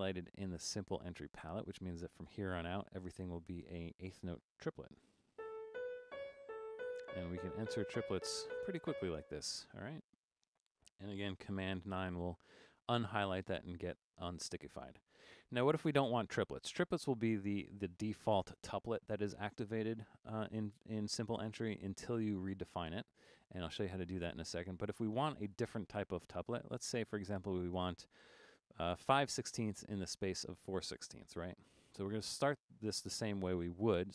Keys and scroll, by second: 5.2-9.0 typing, 12.0 super+9.